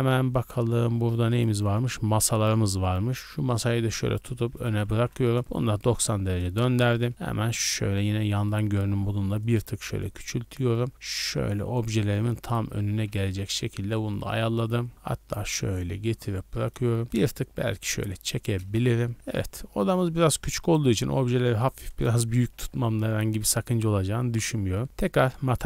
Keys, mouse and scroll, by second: 1.3-3.5 drag, 4.7 r, 4.9 z, 5.0 KP_9, 5.1 KP_0, 5.6 KP_Enter, 6.6 KP_3, 7.1 scroll up 2, 7.1 z, 7.5 KP_1, 8.3 shift+middle click, 8.5 scroll up 1, 8.8 s, 9.4 click, 10.0 click, 12.9 z, 13.2-13.7 middle drag, 13.9 scroll down 2, 14.1 shift+middle click, 14.4 middle drag, 14.7 scroll up 2, 14.9 click, 15.5-17.0 middle drag, 17.1 click, 18.6 KP_0, 19.1 a, 19.1 scroll down 2, 19.1 a, 19.3 shift+middle drag, 20.6-21.1 right drag, 21.1 s, 21.9 click, 22.5 z, 25.3 scroll up 2.